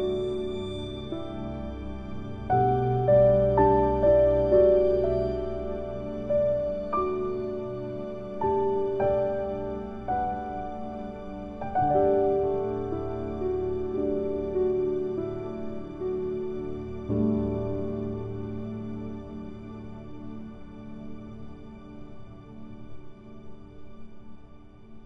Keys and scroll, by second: 9.0 ctrl+z.